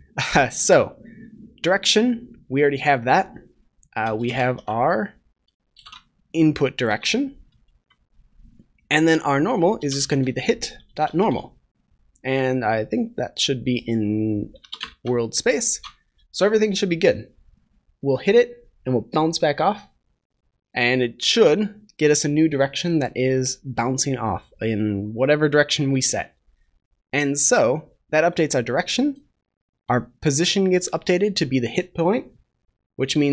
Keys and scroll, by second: 14.5 Return, 15.7 ctrl+s.